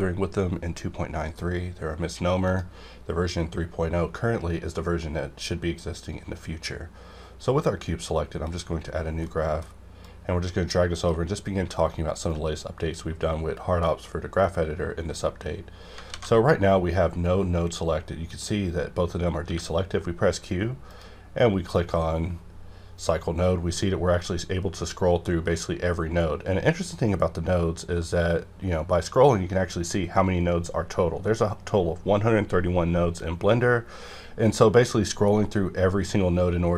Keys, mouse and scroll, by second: 8.3 click, 8.4 click, 9.2 scroll up 1, 9.2 middle click, 10.0-11.9 drag, 11.9-13.8 ctrl+right drag, 13.8 middle click, 14.4-15.9 scroll down 1, 16.1 alt+a, 19.4 q, 20.9 click, 21.4 scroll up 1, 22.1-22.4 scroll up 1, 22.6 scroll up 1, 23.4 scroll up 1, 23.9 scroll up 1, 24.7 scroll up 1, 25.3 scroll up 1, 25.9 scroll down 1, 27.9 scroll up 1, 28.6-29.0 scroll down 1, 33.5 scroll down 1, 34.4 scroll down 1, 35.0 scroll down 1, 35.6 scroll down 1, 36.3 scroll down 1.